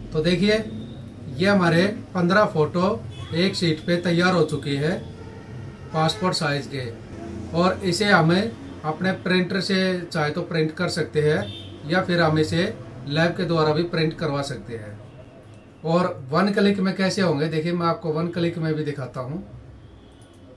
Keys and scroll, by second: 0.1 Left.